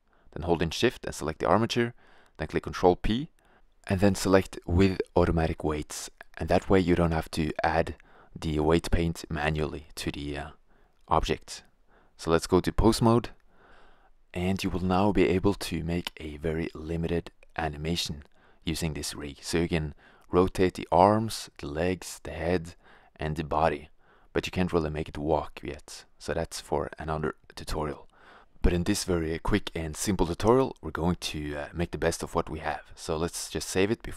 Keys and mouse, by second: 2.1 ctrl+p, 13.2 right click, 13.6 r, 16.3-17.5 middle drag, 17.5 drag, 17.6 r, 19.6 r, 20.3-20.9 drag, 20.9 r, 25.0-26.0 drag, 26.0 right click, 28.6-29.6 drag, 32.4-34.1 drag.